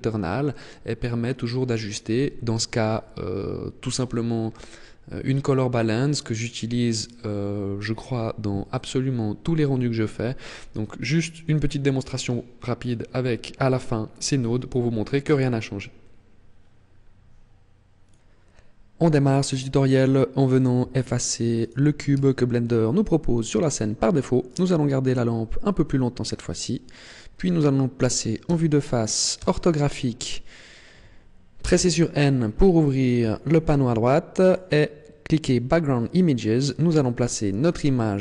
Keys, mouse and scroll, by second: 21.7 right click, 22.2 x, 24.6 right click, 28.5 KP_1, 29.4 KP_5, 31.7 n, 32.6-33.8 scroll down 14, 34.5 click, 35.5 click, 36.7 click, 37.7 scroll down 5.